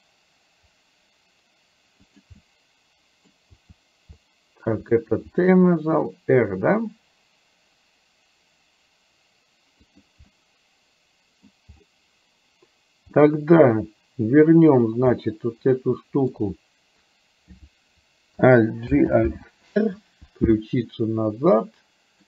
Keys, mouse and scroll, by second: 2.4-3.4 middle drag, 3.7 t, 4.7 t, 5.4 r, 10.3-11.5 middle drag, 13.3 middle click, 14.8 click, 15.2-16.3 middle drag, 18.9 alt+g, 19.3 alt+r, 20.9-22.2 middle drag.